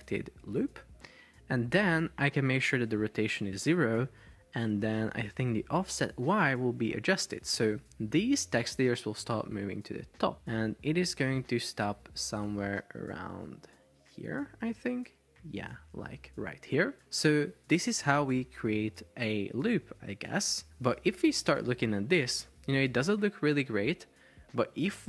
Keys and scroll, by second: 3.1 0, 3.3 Return, 21.2 super+p, 23.8 Escape.